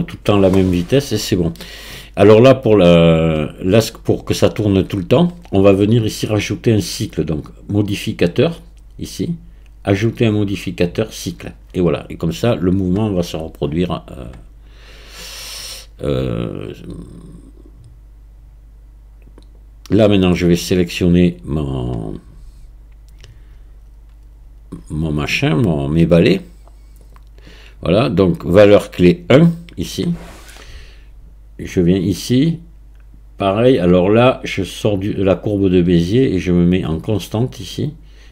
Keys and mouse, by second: 8.0 click, 10.0-11.3 drag, 19.4 click, 27.0 click, 28.7 click, 31.7 click, 34.8-36.8 drag.